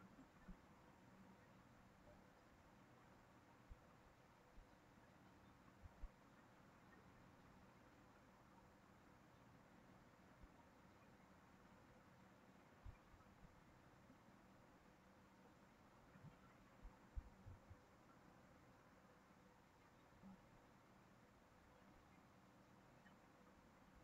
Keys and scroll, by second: 8.2 ctrl+c, 8.4 ctrl+v.